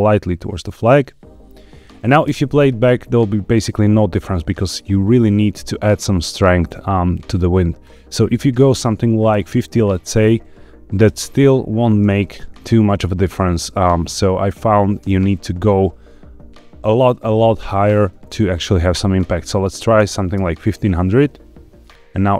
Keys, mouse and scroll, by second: 0.7 click, 2.2 space, 7.8-9.7 drag, 11.0 space, 11.2 click, 11.9 space, 15.1 space, 18.8-20.3 drag, 20.0 KP_0, 21.7-22.1 drag.